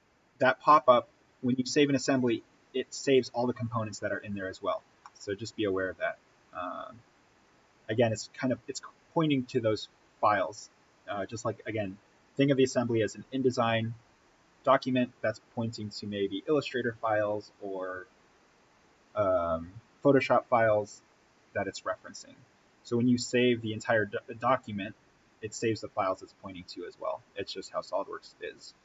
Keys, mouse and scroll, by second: 4.3-4.9 scroll up 1, 4.9-28.8 middle drag.